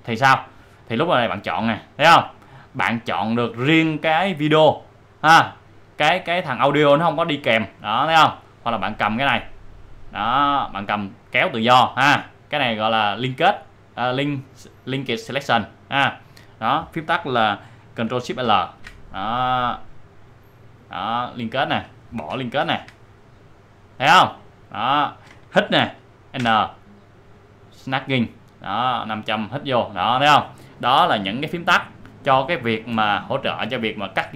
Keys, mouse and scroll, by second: 1.6-6.6 drag, 7.5-13.4 drag, 15.8 click, 18.1 click, 18.4 ctrl+shift+l, 19.7-21.7 drag, 22.6 ctrl+shift+l, 23.7 click, 26.4 n, 27.0-31.2 drag.